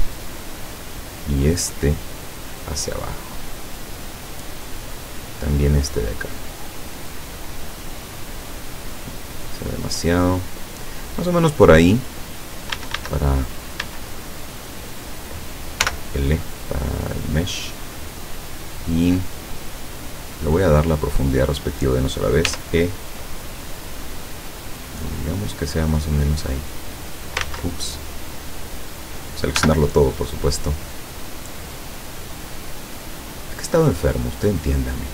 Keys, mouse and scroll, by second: 1.8 right click, 2.4-4.4 drag, 5.7 right click, 6.4-8.6 drag, 9.0 right click, 9.5-11.1 drag, 11.2 scroll down 1, 12.8 a, 13.9 a, 15.0 right click, 15.9 l, 16.9 click, 17.6-18.0 scroll down 1, 18.7-20.0 drag, 20.2 middle click, 22.5 e, 25.8 click, 26.6-27.6 drag, 27.5 ctrl+z, 29.6 l, 30.2-31.2 drag, 31.8 click, 32.8 scroll down 1, 34.1-35.1 drag.